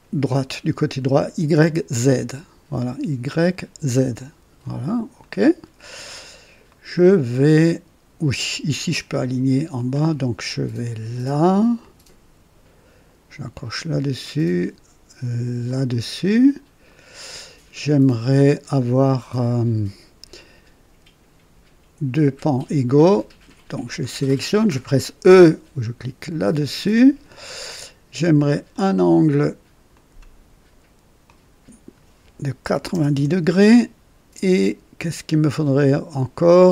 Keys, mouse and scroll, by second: 2.0 click, 5.1 click, 6.6-7.8 right drag, 9.7 click, 11.7 click, 13.7 click, 15.6 click, 16.8 right click, 17.9 right click, 22.1 click, 23.8 click, 26.2 e, 26.4 e, 28.6 click, 29.9 click, 31.2 click, 32.6 KP_9, 32.8 KP_0, 33.1 KP_Enter.